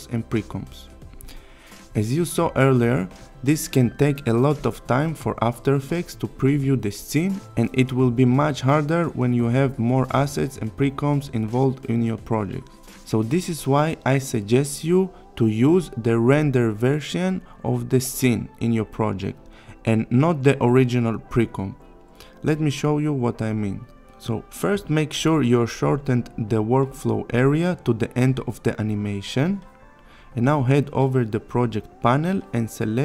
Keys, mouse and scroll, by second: 2.7 space, 5.3-6.6 click, 9.3 click, 11.6-12.5 click, 15.3 click, 15.5 s, 15.7 click, 16.1-16.5 click, 16.6 click, 17.2 Down, 18.5 click, 20.7 click, 21.4-24.8 click, 26.6 click, 27.7 click.